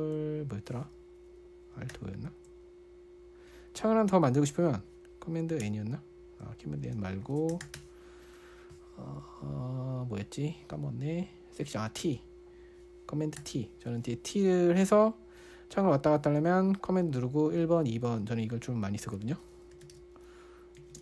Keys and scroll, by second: 2.3 super+o, 6.0 super+n, 7.4-8.5 typing, 13.8 super+t, 16.6 super+1, 18.0 super+2, 18.3 super+1, 18.6 super+2, 19.9-21.0 typing.